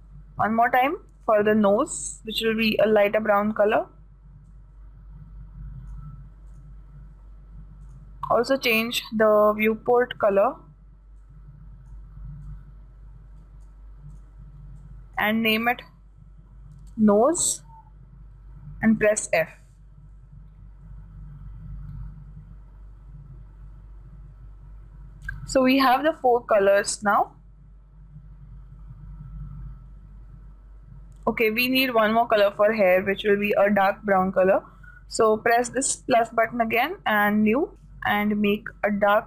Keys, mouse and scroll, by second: 8.4-12.5 drag, 14.7-18.0 drag, 19.4-21.4 drag, 27.4-29.4 drag, 36.6-39.2 drag.